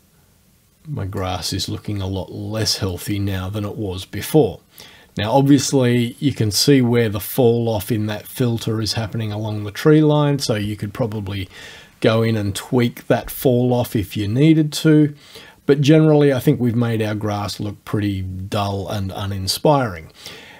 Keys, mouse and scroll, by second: 2.9 click.